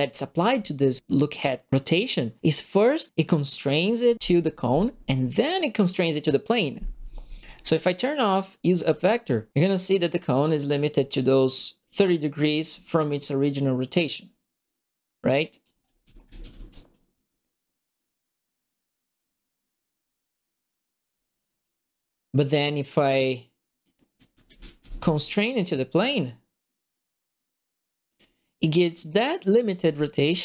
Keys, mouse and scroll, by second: 0.1 click, 0.1 right click, 0.3 click, 0.7 right click, 8.3 click, 10.4-15.6 drag, 15.5-16.9 typing, 15.8 right click, 17.9-19.1 drag, 19.8-21.6 drag, 23.9-25.4 typing, 24.1-25.2 right drag, 28.0 click, 29.4-30.3 typing, 29.6 right click.